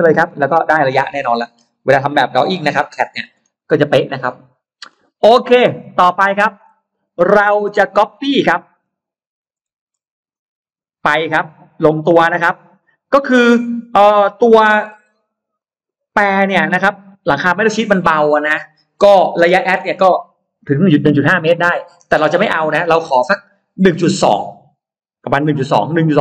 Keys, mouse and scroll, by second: 0.0 scroll up 1, 0.1 scroll down 1, 0.4 scroll up 1, 0.4 middle click, 0.8 scroll down 1, 1.2 middle click, 1.6 scroll down 1, 1.8-2.1 scroll up 1, 2.2 click, 2.5 click, 3.0 Delete, 3.0-4.1 scroll down 2, 3.6 middle click, 4.2 middle click, 4.7-5.0 scroll down 2, 5.2-5.8 scroll up 2, 5.7 middle click, 6.8-7.2 scroll up 2, 7.4 middle click, 8.1 middle click, 9.6 shift+x, 10.2-11.7 shift+drag, 11.9 shift+click, 13.8 shift+click, 14.7 shift+click, 15.4 shift+click, 15.9 shift+click.